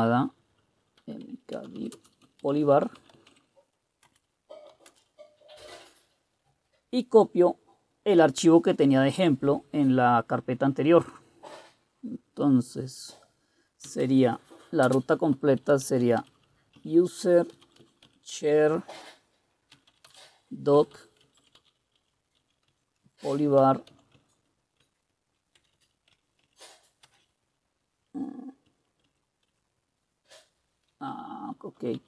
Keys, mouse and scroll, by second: 0.8-5.6 typing, 13.8-18.3 typing, 19.5-27.0 typing, 28.7-29.6 typing, 31.6-32.0 typing.